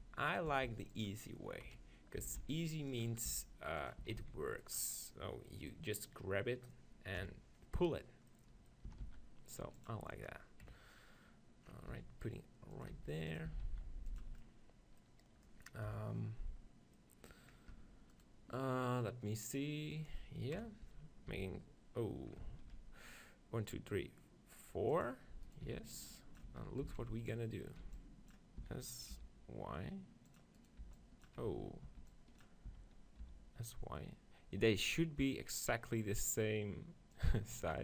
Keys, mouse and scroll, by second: 0.7 s, 1.7 KP_1, 2.3 s, 3.3 g, 4.9-6.7 drag, 7.2 KP_7, 8.4 middle click, 8.9 s, 9.1 middle click, 9.9-11.7 drag, 10.7 KP_3, 11.9 g, 12.9-14.1 drag, 12.9 s, 13.5 s, 15.8 click, 16.0 KP_7, 17.7 Tab, 18.1-19.5 right drag, 20.6 KP_7, 21.3 ctrl+f, 22.7 ctrl+r, 25.1-27.0 drag, 25.5-26.8 right drag, 25.7-28.6 typing, 27.0 right click, 30.4-32.9 drag, 30.6-32.3 right drag, 30.9 n, 31.5 n, 32.0 b, 32.8 s, 37.3-37.8 drag.